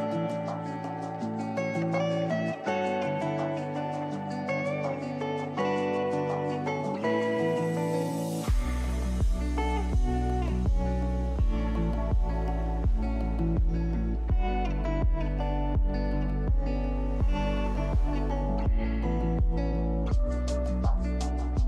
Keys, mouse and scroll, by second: 0.0-0.5 shift+middle drag, 0.5 Tab, 0.9 shift+middle click, 1.2 scroll up 4, 1.5 shift+middle click, 2.0-3.5 scroll up 1, 3.9 alt+click, 4.5 alt+shift+click, 4.9 alt+shift+click, 5.2 alt+shift+click, 5.4 alt+shift+click, 5.9 alt+shift+click, 6.3 alt+shift+click, 6.7 alt+shift+click, 7.1 alt+shift+click, 7.4 alt+shift+click, 8.0 alt+shift+click, 8.2 scroll up 2, 8.6 middle click, 9.4 alt+shift+click, 9.9 alt+shift+click, 10.2-11.4 shift+middle drag, 11.4 alt+shift+click, 12.0-13.4 middle drag, 13.4-13.7 scroll down 4, 13.7 shift+middle click, 14.7 alt+shift+click, 15.8 alt+shift+click, 16.1-16.6 scroll down 5, 16.6 scroll up 2, 16.9 shift+middle click, 17.4 alt+shift+click, 18.1 alt+shift+click, 18.6 alt+shift+click, 19.3 alt+shift+click, 19.7 alt+shift+click, 20.0 alt+shift+click, 20.3 alt+shift+click, 20.7 middle click, 21.0-21.4 scroll up 1.